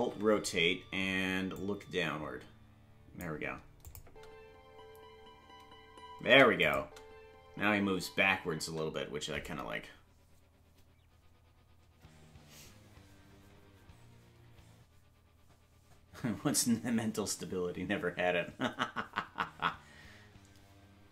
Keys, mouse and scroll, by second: 0.0 alt+r, 1.5-3.2 drag, 3.8 click, 4.0 space, 6.6 click, 6.8 space, 8.9 space.